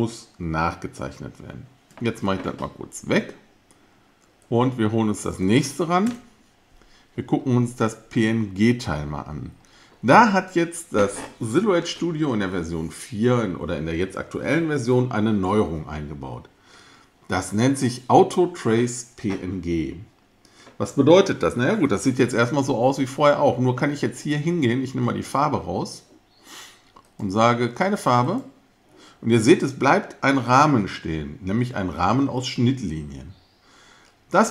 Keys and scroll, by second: 6.1 BackSpace.